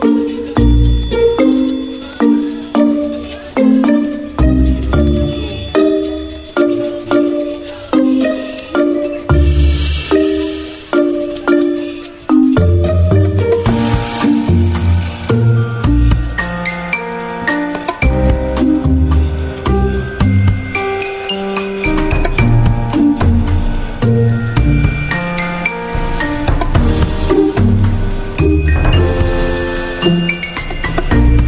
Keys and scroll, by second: 9.9 v, 19.5 ctrl+z, 27.9 ctrl+shift+], 29.9-31.4 typing.